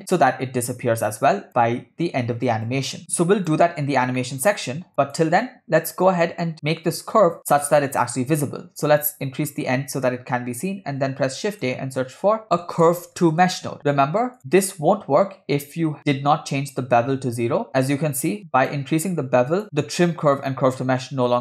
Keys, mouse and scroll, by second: 2.7 click, 4.0 scroll down 2, 4.2 middle click, 4.9 click, 7.1 click, 8.8-9.1 scroll up 2, 9.5 middle click, 10.9 shift+a, 15.3-16.1 scroll down 2, 18.6 click, 19.5 click, 19.6 scroll up 2.